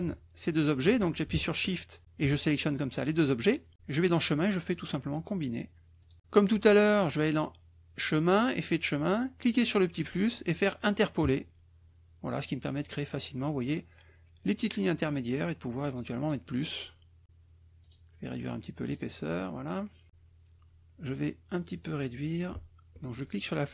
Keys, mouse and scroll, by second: 2.0 shift+click, 3.9 click, 6.1 click, 6.5 click, 8.4 click, 9.5 click, 11.2 click, 15.9 click, 17.8 right click, 18.8 click, 23.2-23.7 shift+drag.